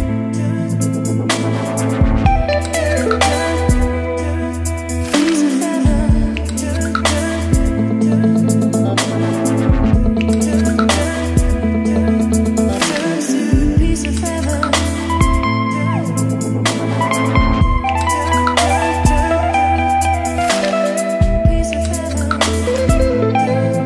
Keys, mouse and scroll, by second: 23.1 click, 23.6-23.8 typing.